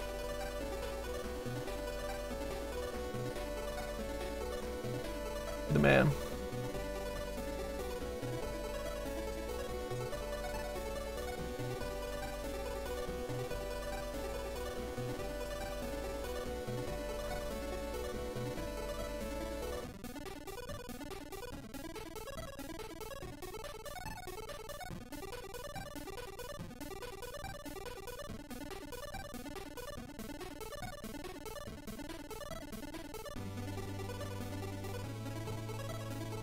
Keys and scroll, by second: 7.6 s, 15.7 s.